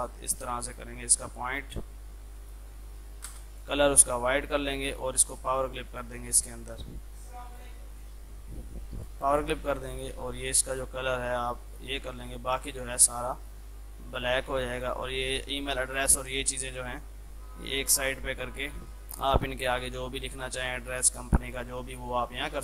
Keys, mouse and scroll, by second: 0.2 click, 0.5 Down, 2.4 click, 2.7 Down, 3.3 space, 3.6 click, 4.5 right click, 5.7-19.3 drag, 19.3 Left, 20.6-22.6 drag.